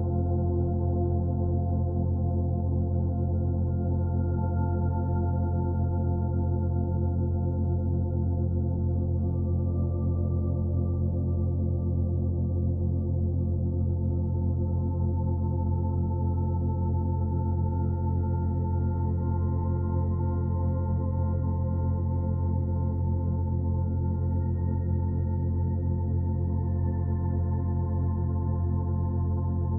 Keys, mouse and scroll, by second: 0.2 l, 1.2 l, 1.4 middle click, 1.8 g, 4.0 middle click, 4.4 scroll down 4, 7.7 s, 9.4 alt+middle click, 9.9 g, 13.5 2, 14.3 click, 14.6 g, 16.0-16.3 scroll down 3, 16.3 shift+middle click, 16.6-17.2 scroll up 3, 17.2 click, 17.7 3, 17.9 click, 18.6 g, 20.2 2, 20.6 click, 20.8 g, 22.3 click, 22.4 g, 24.1 click, 24.2 g, 24.9 scroll down 1, 25.1 middle click, 25.9 scroll up 1, 26.2 shift+middle click, 26.6 Tab, 26.7-27.2 scroll down 8, 27.2 b, 27.7 o, 29.2 click.